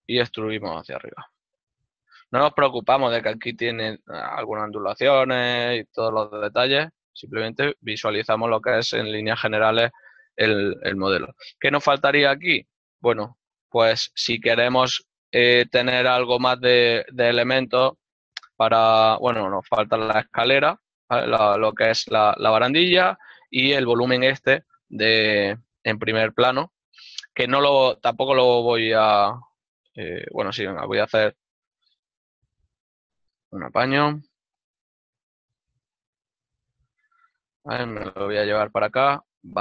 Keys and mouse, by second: 1.0 click, 1.4 shift+middle click, 9.2 shift+middle click, 17.1 right click, 17.8 l, 31.3 right click, 32.2 l, 35.2 Return, 36.4 g.